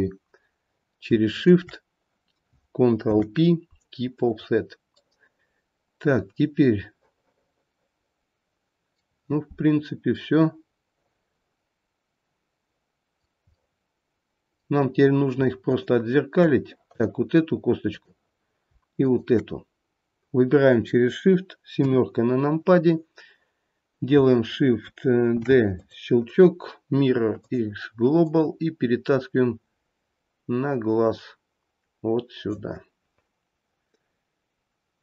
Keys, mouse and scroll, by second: 1.3 shift+click, 3.1 ctrl+p, 5.0 middle click, 5.5 middle click, 13.6 middle click, 15.7 shift+click, 16.9 click, 18.0 click, 19.1 shift+click, 21.8 KP_7, 22.9-24.2 scroll down 1, 25.4 shift+d, 26.3 right click, 28.3 click.